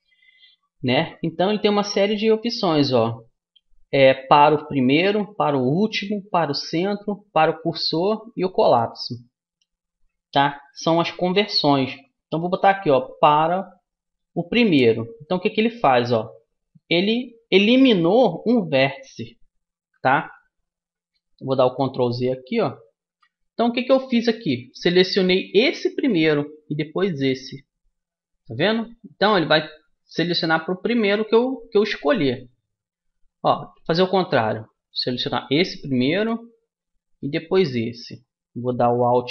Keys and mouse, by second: 22.8 ctrl+z, 24.2-26.2 middle drag, 26.2-29.0 right drag, 32.0-35.1 middle drag, 35.1-36.9 drag, 37.2-39.0 right drag.